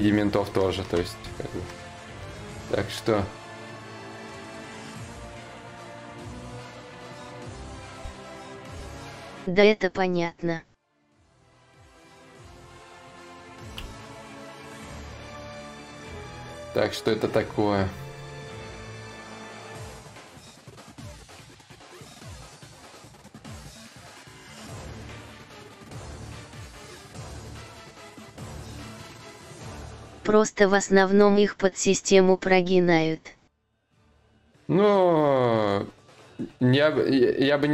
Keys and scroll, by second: 7.2 ctrl+z, 7.6 ctrl+z, 8.4 ctrl+z, 8.8 ctrl+z, 9.4 ctrl+z, 13.4 ctrl+z.